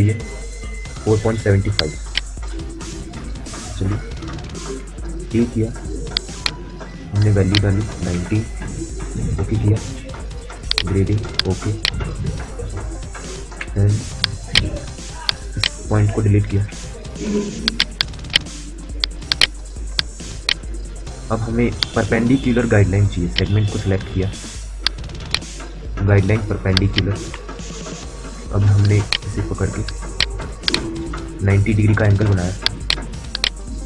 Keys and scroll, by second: 5.0 a, 13.3 End, 16.3 Delete, 28.0 q.